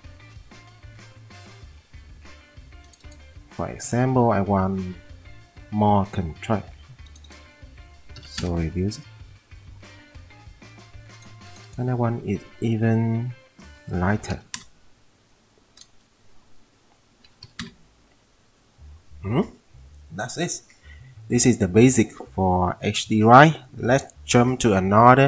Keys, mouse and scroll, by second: 8.1-9.1 typing, 8.4 middle click, 8.6-9.1 scroll up 1, 14.4 1, 14.5 click, 14.7-15.2 scroll up 1, 17.4 typing.